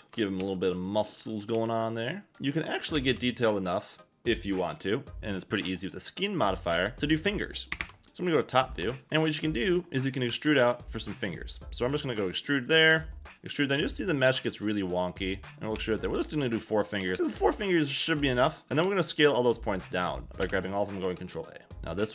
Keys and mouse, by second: 0.0 g, 0.1 shift+middle click, 0.7 click, 1.2 click, 1.5 g, 2.3 ctrl+a, 2.3 e, 3.0 ctrl+a, 4.5 click, 5.3 click, 7.7 KP_7, 7.8 KP_7, 10.3 e, 12.2 click, 12.9 e, 14.4 click, 15.4 KP_7, 15.4 e, 15.7 e, 16.7 click, 17.0 a, 17.1 a, 17.2 b, 18.0 b, 18.8 ctrl+a, 20.4 Escape, 21.1 ctrl+a.